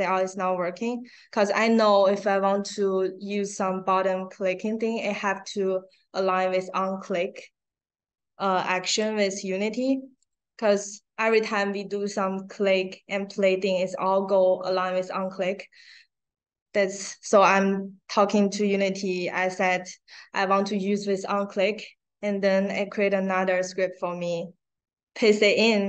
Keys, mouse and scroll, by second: 0.0 click, 11.2 middle click, 11.2 scroll down 1, 17.6 click, 19.2-20.2 scroll down 2, 21.3-21.7 scroll down 2, 23.4 click, 24.0 click.